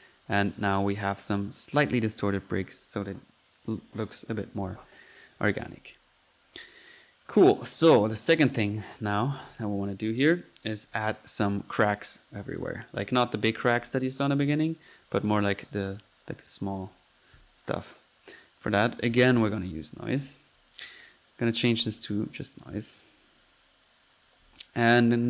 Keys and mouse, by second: 0.0-0.6 typing, 0.1 click, 0.6 click, 0.7 F1, 5.0 click, 5.6 Escape, 6.2-6.6 middle drag, 6.6 drag, 7.4-7.7 right drag, 7.6 click, 7.9-8.8 drag, 9.2 click, 14.3 click, 16.7 middle click, 16.9 click, 17.4 click, 19.1 typing, 19.9-20.5 drag, 20.6 click, 21.8-22.8 drag, 23.0 drag, 23.6 click.